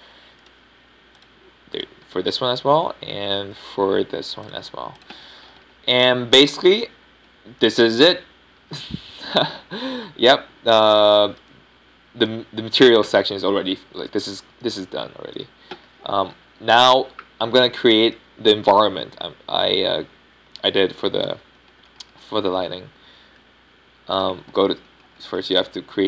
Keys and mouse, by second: 0.1-1.9 drag, 10.6 a, 11.1 a, 18.0 KP_5, 18.3 KP_1, 25.0 shift+a.